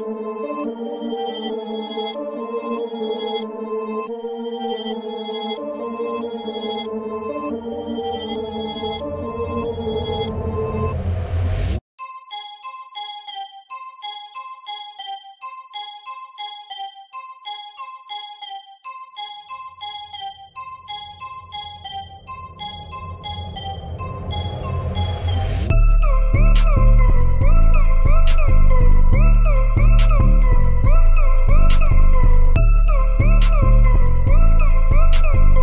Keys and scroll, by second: 13.3 ctrl+e, 14.6 ctrl+e.